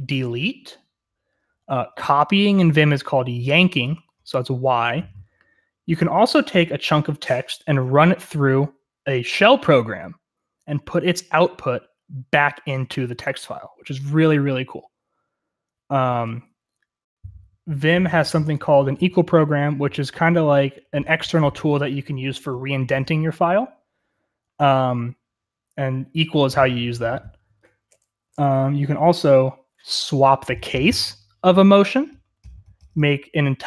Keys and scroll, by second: 28.2-29.2 typing.